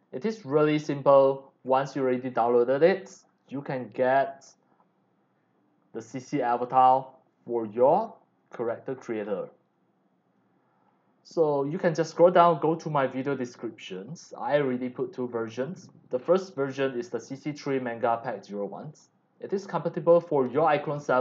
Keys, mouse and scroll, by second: 0.0 click, 0.1 click, 1.6-2.4 scroll down 3, 3.3-6.5 drag, 3.3 x, 4.0 c, 8.0 click, 8.6-9.3 scroll down 4, 9.7 click, 9.7 x, 10.1 c, 11.6 click, 12.6 scroll up 1, 16.7-19.6 drag.